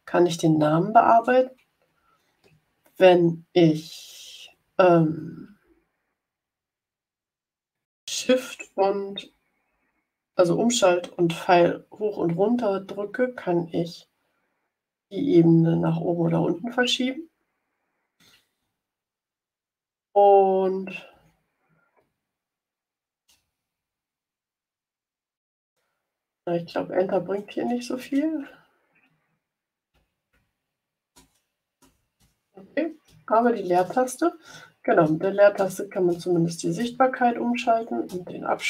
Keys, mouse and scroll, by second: 0.8 Return, 5.2 Up, 5.7 Up, 6.3 Up, 13.4 shift+Down, 14.2 shift+Down, 14.8 shift+Down, 15.3 shift+Down, 16.5 shift+Up, 17.3 shift+Up, 19.8 Down, 21.0 Right, 23.2 space, 24.7 Return, 27.1 Return, 27.9 Return, 29.1 Down, 29.8 Up, 30.2 Right, 31.0 Return, 31.7 Return, 32.1-36.7 typing, 37.5 Right, 38.0 space, 38.5 space.